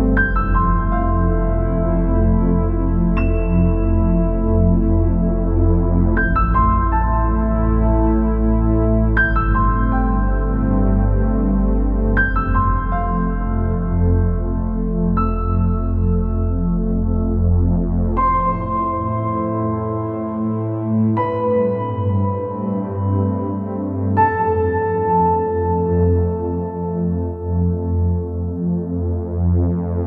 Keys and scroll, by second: 5.7-6.3 space, 7.0 space.